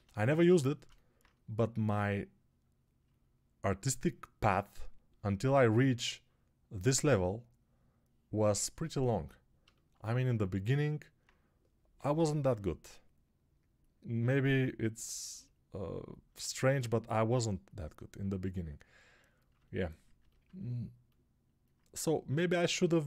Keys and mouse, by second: 11.8 g.